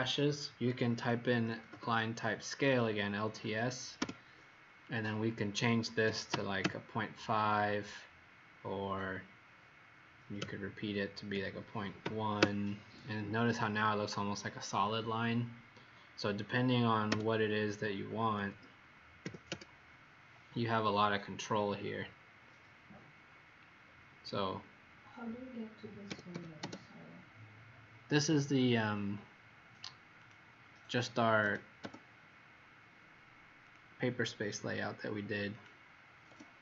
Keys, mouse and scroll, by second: 1.2-1.6 typing, 3.9 Return, 6.2 KP_5, 6.5 KP_Enter, 12.0 KP_1, 12.3 KP_Enter, 17.0 Return, 19.2 KP_4, 19.4 KP_Enter, 22.8 scroll down 1, 26.0 typing, 28.1 click, 33.6 click.